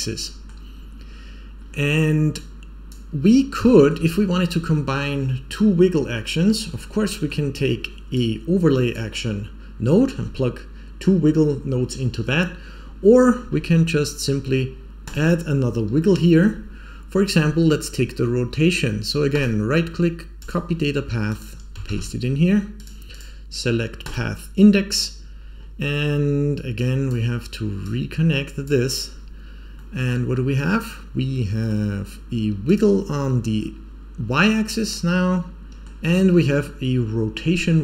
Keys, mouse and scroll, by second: 1.6-2.2 scroll down 4, 2.3-2.8 drag, 3.1 scroll down 2, 3.5 shift+middle click, 4.2-4.6 scroll up 3, 6.4-6.7 scroll down 3, 6.7 scroll up 2, 7.0 middle click, 8.1 click, 13.2-13.8 scroll up 7, 13.8 middle click, 15.0 click, 15.9 middle click, 19.2-20.4 right drag, 21.2-22.8 drag, 23.0-24.0 drag, 25.4-26.0 scroll down 3, 26.7-27.0 drag, 27.8-28.6 drag, 29.7-31.6 middle drag, 32.6 click, 34.3-35.8 middle drag.